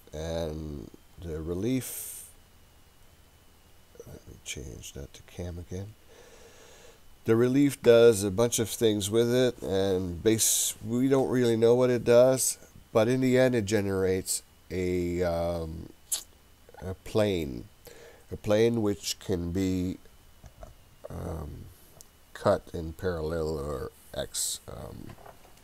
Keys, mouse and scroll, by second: 2.0-3.5 scroll up 3, 3.5-5.8 drag.